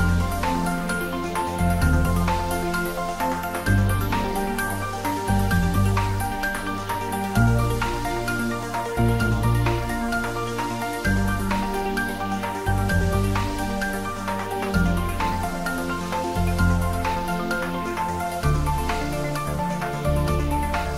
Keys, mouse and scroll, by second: 0.0 click, 0.2 scroll up 1, 0.5-2.3 middle drag, 2.3 g, 3.4 click, 3.8-4.7 scroll up 1, 9.1 click, 9.7-10.5 scroll up 1, 10.5 scroll down 1, 11.2 click, 11.9 `, 12.1 3, 12.9 g, 13.2 z, 14.5 click, 15.0 z, 16.2 scroll down 1, 17.8 shift+z, 19.2 middle click, 20.2 click, 20.6-20.9 scroll down 1.